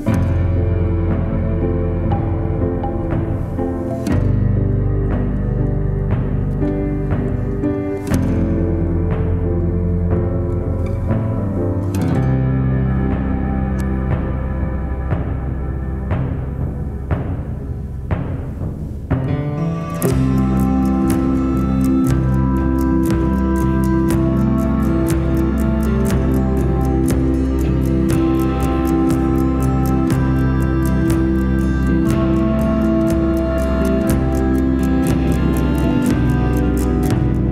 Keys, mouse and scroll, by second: 0.4 r, 3.6 click, 3.8 r, 4.1 middle click, 4.3 r, 4.4 middle click, 4.6 click, 4.8 click, 5.0 middle click, 5.3 r, 5.6 click, 5.7 middle click, 6.0 scroll down 3, 6.2 scroll up 3, 6.4 click, 6.6 g, 7.0 middle click, 7.2 click, 7.7 middle click, 8.0-8.4 middle drag, 8.4 click, 8.5 middle click, 9.0 middle click, 9.4 click, 9.8 middle click, 10.2 g, 10.8 click, 11.2 middle click, 11.6 r, 11.8 middle click, 12.1 click, 12.3 middle click, 12.5 r, 12.6 middle click, 12.7 click, 12.7 middle click, 13.0 click, 13.1 r, 13.3 middle drag, 13.8 middle click, 13.8 r, 14.1-14.4 middle drag, 14.7 click, 14.8 middle click, 14.9 g, 15.2-15.6 middle drag, 15.6 r, 15.8 middle click, 15.9 drag, 15.9-16.2 middle drag, 16.3 middle click, 16.6 r, 16.8 middle click, 17.1 click, 17.1 middle click, 17.2 r, 17.4 middle click, 18.0 click, 18.2 click, 18.2 g, 18.7 middle click, 19.2 click, 19.5 middle click, 19.6 click, 19.9 middle click, 20.2-24.4 typing, 20.4-20.7 middle drag, 20.9 click, 21.3 middle click, 22.2 middle drag, 22.8 middle click, 23.1 middle click, 23.4 click, 23.7 middle drag, 24.7 click, 24.9 middle drag, 25.6 click, 25.9 scroll down 2, 26.1 middle drag, 26.3 scroll up 1, 26.5-29.1 middle drag, 29.1-29.7 scroll down 2, 31.1 click, 32.5 shift+a, 34.7-35.8 scroll up 5, 35.8-36.5 shift+middle drag, 36.5-37.5 scroll up 2.